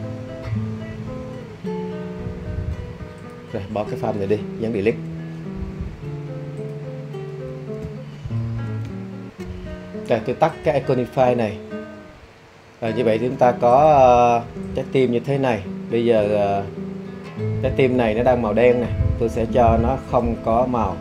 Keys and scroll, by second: 4.8 BackSpace.